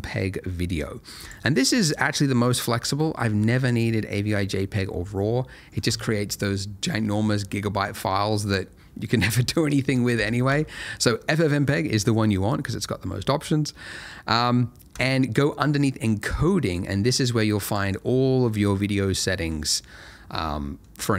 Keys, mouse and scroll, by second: 1.2 click, 14.9 click, 15.4 middle click, 17.3 click, 17.9 middle click.